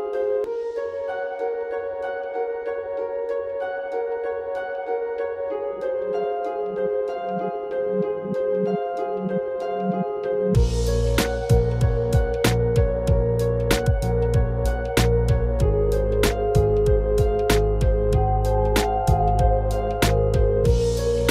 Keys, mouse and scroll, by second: 3.3 ctrl+r, 8.6 click, 10.4 click, 14.9 e, 17.5 m, 20.3 click.